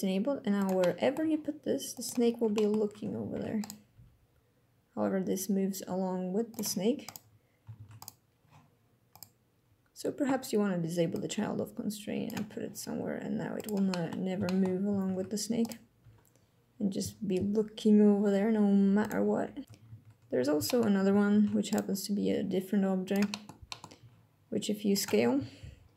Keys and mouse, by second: 0.3 drag, 0.5-0.9 middle drag, 0.9 g, 1.6 click, 2.3 click, 3.0 ctrl+Tab, 3.6 g, 6.2 click, 6.8 click, 7.5 ctrl+Tab, 10.8-12.0 drag, 12.2 g, 13.3 drag, 13.6 drag, 14.2 shift+click, 14.8 ctrl+Tab, 15.7 g, 18.7 click, 20.4 shift+click, 21.0 ctrl+Tab, 22.0 g, 22.7 click, 23.0 click, 23.4 drag, 23.7 g, 24.6 click, 25.1 s, 25.8 click.